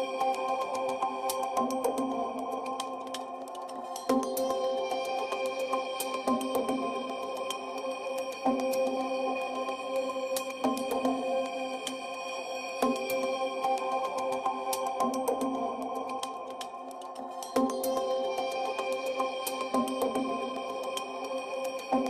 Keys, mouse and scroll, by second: 4.0 s, 5.1 KP_Decimal, 6.0 w, 8.3 click, 8.6 click, 8.9 click, 10.5 click, 14.6 Tab, 16.0 click, 16.3 Tab, 17.3 ctrl+r, 21.7 KP_Enter.